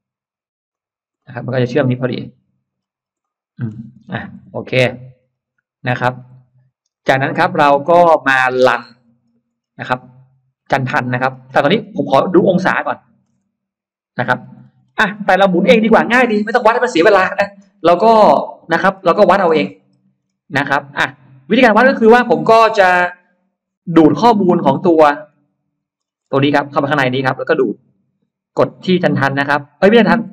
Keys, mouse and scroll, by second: 0.6 click, 1.0 middle click, 1.5-2.2 scroll down 2, 2.0 middle click, 2.6-3.2 scroll down 1, 3.1 middle click, 3.9-4.3 scroll up 1, 3.9 space, 4.1 Escape, 4.3-5.5 scroll down 3, 4.8 middle click, 5.6-6.3 scroll up 1, 6.0-7.8 middle drag, 7.8 scroll down 1, 8.6-10.0 scroll up 3, 9.8-10.9 middle drag, 11.1 scroll down 1, 11.5-12.5 scroll up 2, 12.8 middle click, 14.2-15.7 scroll down 6, 17.9-18.8 scroll down 4, 18.8-20.4 scroll up 6, 20.8-21.2 scroll up 2, 21.0 middle click, 23.7-25.4 scroll down 7, 25.0 middle click, 25.6-26.4 scroll up 2, 26.2 space, 26.5 click, 26.6 click, 27.0 click.